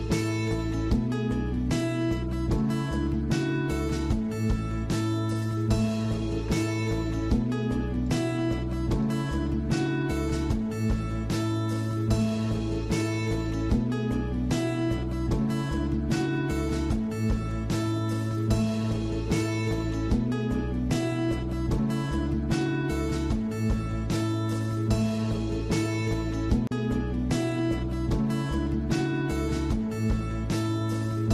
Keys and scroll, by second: 6.4 Escape, 13.2 alt+Tab.